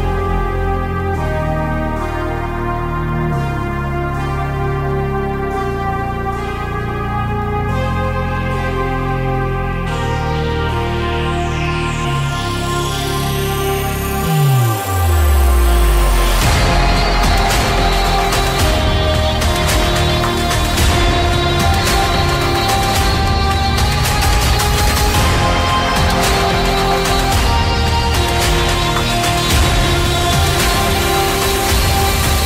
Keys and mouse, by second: 0.6 ctrl+r, 27.9-30.4 middle drag, 30.8 middle click.